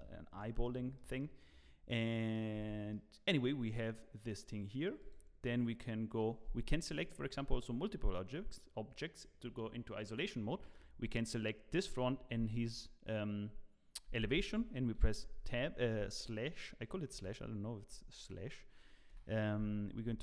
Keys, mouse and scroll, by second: 0.4 middle click, 0.9 middle click, 1.1 middle click, 1.1 scroll down 1, 2.3 middle click, 2.5 Tab, 2.9 middle click, 4.2 click, 4.7 middle click, 5.0 click, 6.9 shift+click, 7.8 scroll down 1, 8.2 middle click, 14.9 KP_Divide, 16.3 middle click, 17.1 KP_1, 17.9 KP_3, 19.1 KP_9, 19.8 scroll up 6, 20.1 shift+middle click.